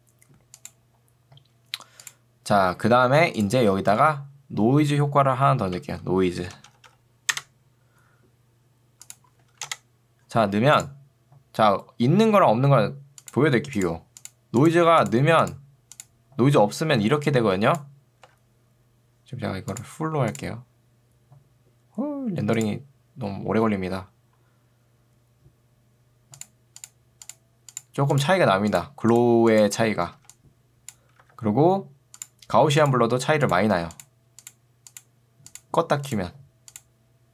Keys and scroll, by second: 5.8 ctrl+space, 6.2 n, 7.4 Return, 9.6 Return, 17.0 ctrl+2, 18.2 Escape, 30.2 ctrl+2, 31.2 Escape.